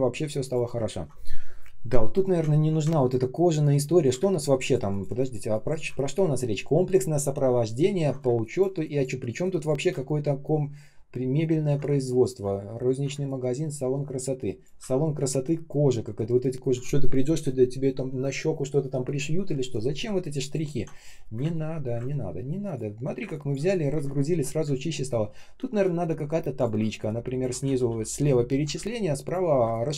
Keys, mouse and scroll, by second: 2.3-2.9 ctrl+scroll up 1, 3.9 ctrl+scroll down 1, 4.1 space, 4.6 space, 5.9 ctrl+scroll up 1, 7.6-8.1 ctrl+scroll down 1, 8.1 space, 8.7 space, 9.0 space, 9.9 ctrl+scroll up 1, 11.4 ctrl+scroll down 1, 11.8-13.6 typing, 12.5 ctrl+scroll up 1, 14.8 ctrl+scroll up 1, 20.3 ctrl+click, 20.7 ctrl+scroll down 1, 21.2 Delete, 22.0 ctrl+scroll up 1, 22.9 ctrl+scroll down 1, 23.1 space, 23.8 Delete.